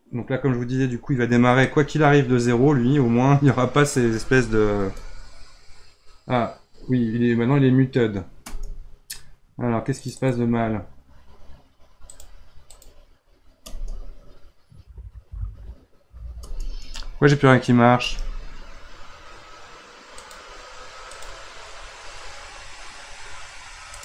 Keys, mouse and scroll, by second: 1.7-4.8 drag, 4.8 space, 8.6 space, 10.0-13.6 drag, 13.6 space, 16.4 space, 16.8 space, 18.1 space, 20.2-24.0 drag.